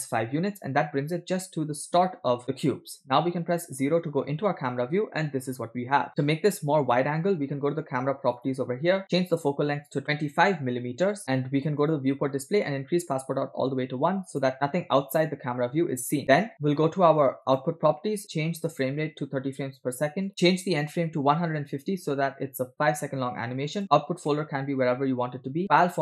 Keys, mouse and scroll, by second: 1.8-2.5 middle drag, 3.8 KP_0, 8.4 click, 9.3 click, 12.0 click, 12.5 scroll down 1, 13.2-14.5 drag, 17.5 click, 18.9-22.3 drag, 23.7-25.3 drag, 24.5 /, 25.7-26.0 drag.